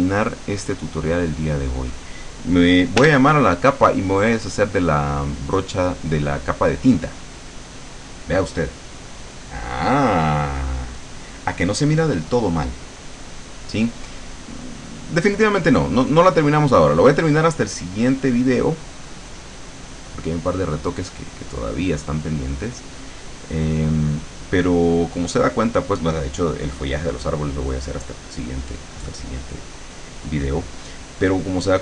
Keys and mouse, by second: 3.1 l, 7.4 click, 14.8 click, 16.8 click, 19.1-23.9 drag.